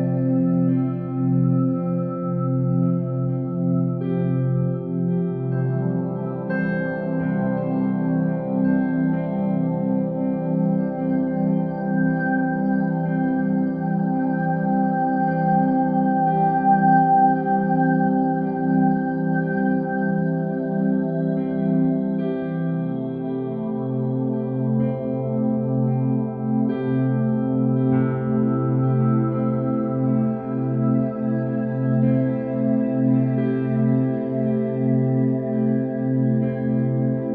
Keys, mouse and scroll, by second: 0.3-2.1 middle drag, 2.1 KP_1, 3.0 shift+a, 8.9 KP_3, 9.4 KP_3, 9.5 KP_3, 10.3 alt+z, 10.7 r, 12.4 r, 14.8 g, 16.3-16.9 shift+middle drag, 16.9-17.4 scroll up 1, 17.4 s, 18.6 g, 20.6 Tab, 20.9 click, 21.4 g, 22.7 e, 24.5 Tab, 25.2 ctrl+z, 25.4 ctrl+z, 25.7 ctrl+z, 26.3 Tab, 26.7 r, 27.3 g, 29.6 Tab, 29.9 click, 30.3 g, 30.9 e, 31.7 e, 33.7 e, 34.6 e, 35.5 e, 36.9 e.